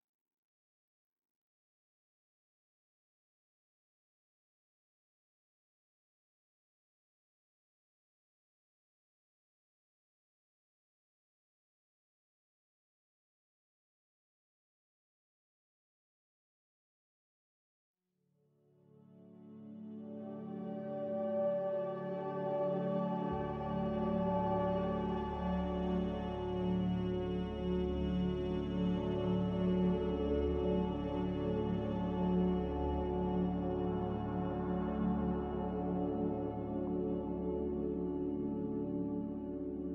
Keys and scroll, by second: 7.7 1, 15.0 q, 17.0 1, 23.0 5.